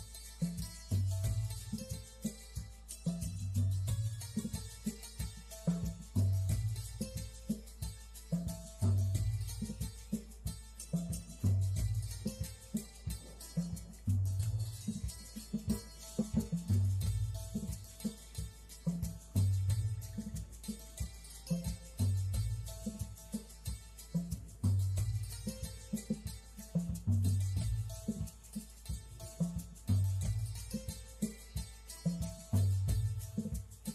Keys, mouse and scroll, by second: 0.7 click, 3.0 click, 6.4 click, 8.2 click, 9.0 click, 9.5 click, 10.2 click, 11.0 click, 12.2 click, 13.0 click, 13.6 click, 14.6 click, 15.8 click, 16.6 click, 17.0 click, 17.2 middle click, 17.5 click, 18.9 click, 19.5 click, 20.9 click, 21.7 click, 22.6 click, 24.5 click, 26.0 click.